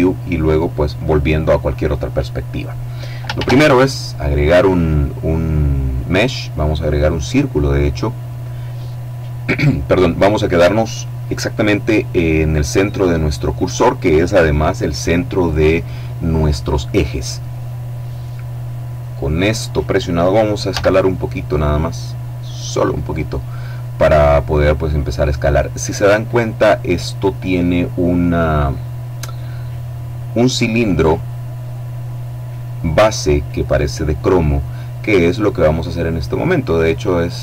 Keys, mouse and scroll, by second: 3.1 shift+a, 7.4 click, 20.4 s, 22.4 click, 36.6-37.4 drag.